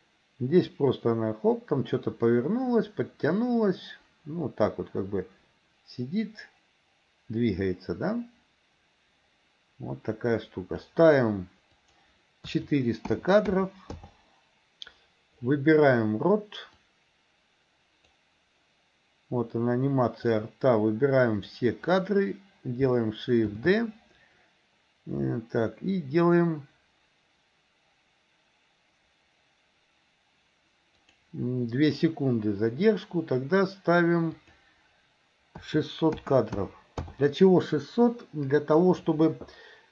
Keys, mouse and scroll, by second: 11.8-14.0 drag, 16.9-18.3 drag, 20.3-21.6 drag, 23.6 shift+d, 34.4 click.